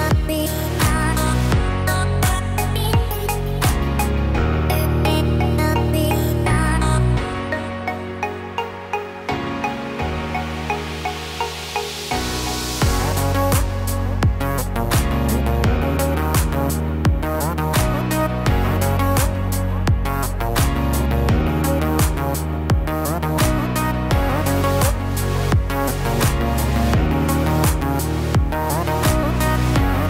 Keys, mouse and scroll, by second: 1.7 click, 17.0 Tab, 17.5 middle click, 18.1 Tab, 20.6 scroll up 1, 21.2 middle click, 22.2 Tab, 23.0 middle click, 24.7 click, 28.7 click, 29.4-30.0 scroll up 2.